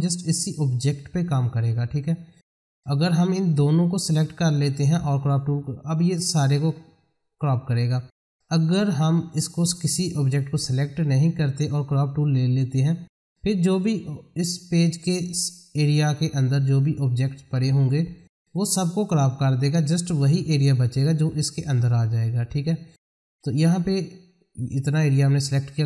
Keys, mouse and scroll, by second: 2.3 click, 8.5 click, 12.7 click, 20.8-25.8 drag.